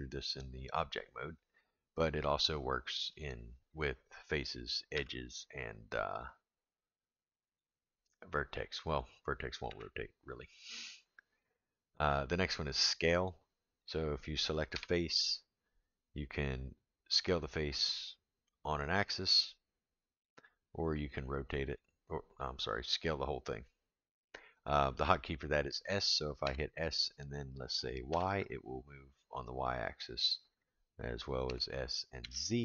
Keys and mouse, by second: 3.1 click, 3.8 click, 4.9 r, 7.4 click, 8.9 click, 9.7 r, 12.8 click, 13.9 click, 14.7 3, 15.2 click, 17.5-18.8 drag, 19.5 click, 21.1 click, 22.8-24.2 drag, 26.4 s, 31.4 s.